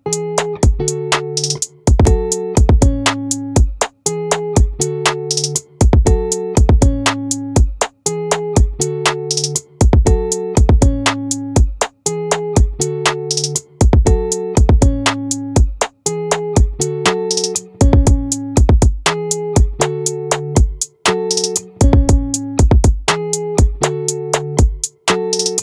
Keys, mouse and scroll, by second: 1.0-2.9 middle drag, 6.7-8.6 drag, 10.5 click, 12.7-14.5 drag, 15.9 a, 17.7-25.6 right drag.